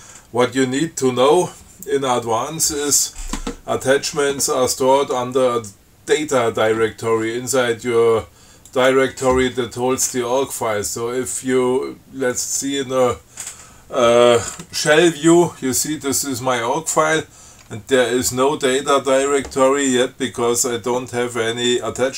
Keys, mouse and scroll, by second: 8.9 click, 12.6 click.